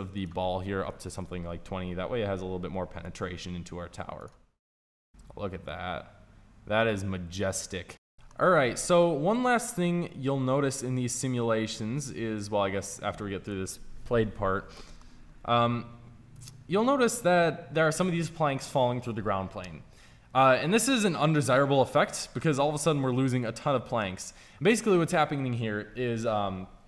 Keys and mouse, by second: 2.9-5.5 drag, 9.5-11.7 drag, 15.0-16.2 middle drag, 17.1-18.8 middle drag, 22.0 middle click, 26.1 middle click.